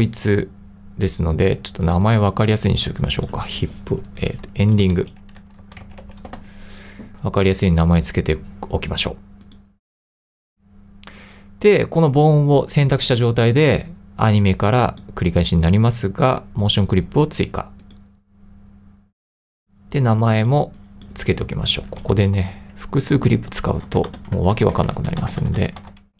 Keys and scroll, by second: 4.6-6.5 typing, 22.1 e, 22.4 d, 23.3 n, 23.9 BackSpace, 24.6 Right, 25.2-26.1 typing.